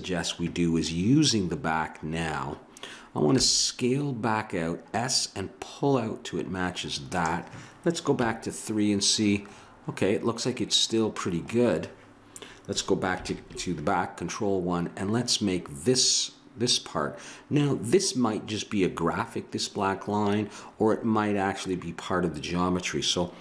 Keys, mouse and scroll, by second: 3.3 s, 8.1 KP_3, 13.3 ctrl+KP_1.